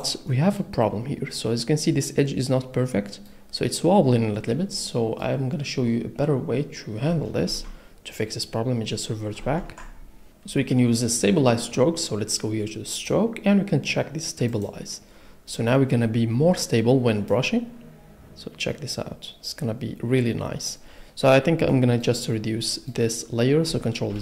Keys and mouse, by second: 4.8 middle click, 8.0 ctrl+z, 9.8 ctrl+z, 13.1-15.0 drag, 22.6 click.